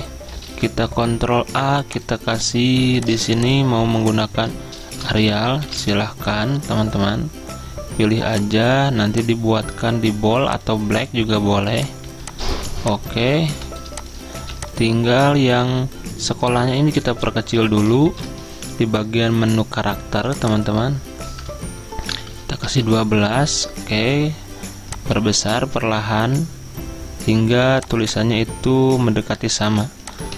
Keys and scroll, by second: 0.0-0.5 typing, 0.6 ctrl+a, 3.9-6.4 typing, 12.8 z, 18.1 ctrl+t, 18.1 typing, 21.9-22.8 typing, 22.8 Return.